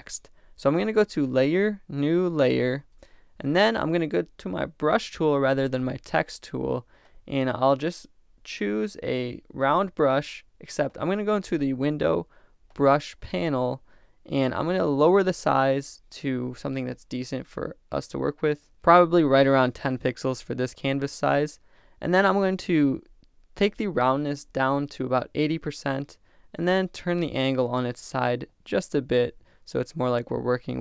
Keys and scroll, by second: 2.9 Return, 24.8-25.6 typing.